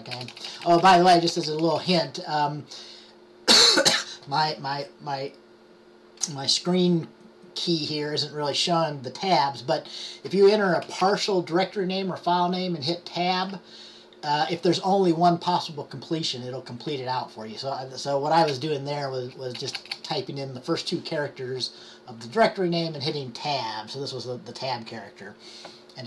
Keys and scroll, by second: 0.3-1.9 typing, 5.3-6.0 typing, 11.0 typing, 13.5 typing, 19.1-20.5 typing, 23.1-24.8 typing.